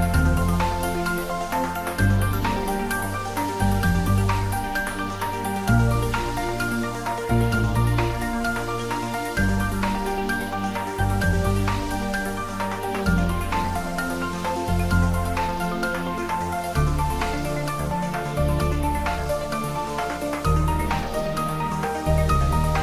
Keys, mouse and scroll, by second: 1.0 click, 1.5-3.7 middle drag, 3.7 click, 5.3 shift+z, 6.6 scroll down 1, 8.6 click, 10.3 z, 11.4 click, 11.7 shift+z, 12.3-14.5 drag, 14.5 shift+d, 17.2 click, 17.9 r.